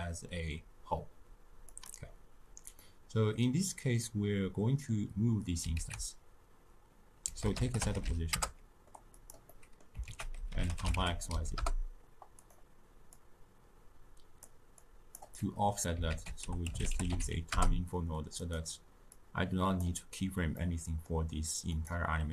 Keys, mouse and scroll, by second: 1.7 click, 2.8-9.1 middle drag, 14.4-17.5 drag, 17.5 ctrl+a, 19.7-22.3 drag.